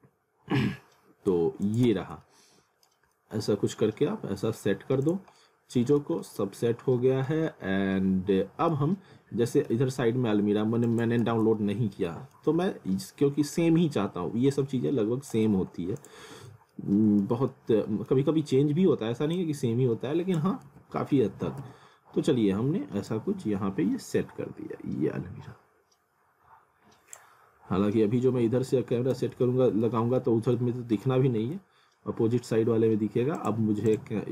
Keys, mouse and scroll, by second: 0.0 scroll down 1, 0.8-1.5 scroll up 1, 1.6 click, 1.8 z, 2.2 alt+middle click, 3.2 alt+middle click, 5.0 click, 5.4 alt+middle click, 6.2 alt+middle click, 7.5 alt+middle click, 9.0 alt+middle click, 10.9 click, 11.2 z, 11.6 middle click, 12.3 scroll down 1, 12.6 middle click, 14.6 shift+click, 16.2 z, 16.7 middle click, 17.3 scroll down 1, 17.5 middle click, 18.3 middle click, 19.4 click, 20.7 ctrl+z, 21.1 alt+w, 21.6 z, 23.1 click, 27.4 scroll down 1, 28.7 alt+w, 29.2 z, 29.4 alt+middle click, 29.9 scroll down 1, 31.2 w, 33.4 click.